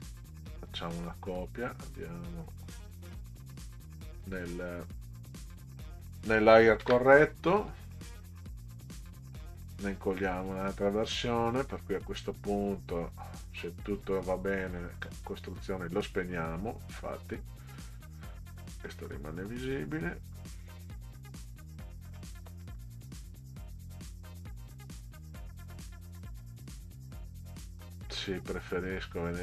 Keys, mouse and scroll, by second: 0.5 scroll up 2, 0.6 middle click, 2.8 click, 6.8 ctrl+v, 9.5-11.0 drag, 14.8 click, 18.9-20.6 drag, 22.2 middle drag, 22.8 ctrl+scroll up 2, 24.8 ctrl+scroll up 2, 27.2 ctrl+click, 28.1 ctrl+click.